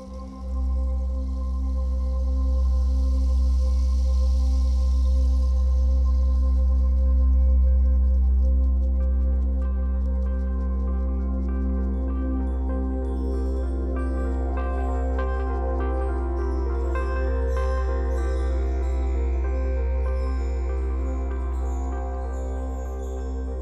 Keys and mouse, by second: 2.0 click, 5.0-5.8 drag, 7.7 click, 9.0 click, 10.9 alt+click, 12.7 ctrl+s, 15.3-16.3 drag, 16.3 n, 17.3-23.6 ctrl+alt+drag.